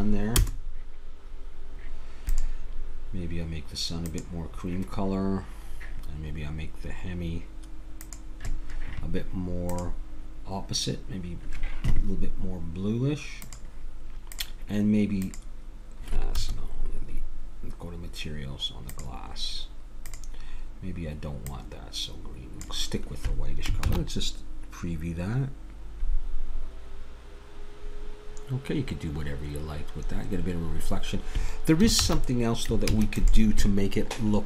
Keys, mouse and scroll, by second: 2.3-4.2 drag, 8.0-11.6 drag, 14.3-17.8 drag, 18.9-21.9 drag, 23.9 shift+z, 32.1 shift+z, 32.9 ctrl+s.